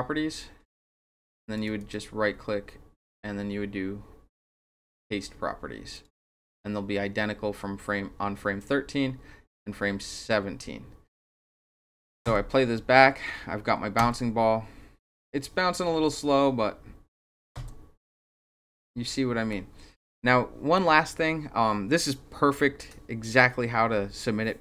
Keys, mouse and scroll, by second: 0.7 click, 1.6 click, 1.8 right click, 5.9 click, 8.6-11.7 drag, 14.0 Return, 16.0 Return, 17.5 Return.